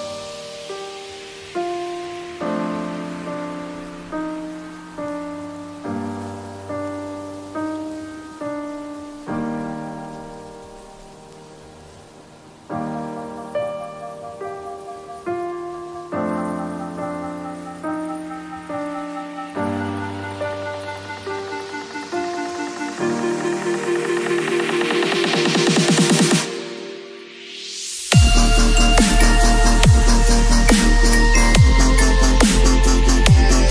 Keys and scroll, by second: 2.0 v, 3.4 b, 3.7 x, 4.7 v, 8.3 space, 12.2 b, 13.8 ctrl+z, 14.1 x, 15.4 v, 20.7 ctrl+c, 20.8 ctrl+w, 21.1 ctrl+v, 22.2 alt+shift+s, 22.7 ctrl+t, 33.4 b.